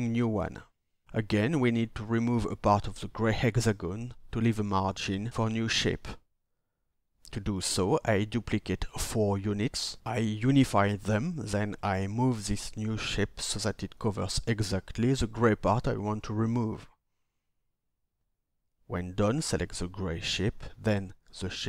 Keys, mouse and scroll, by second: 16.6 shift+click.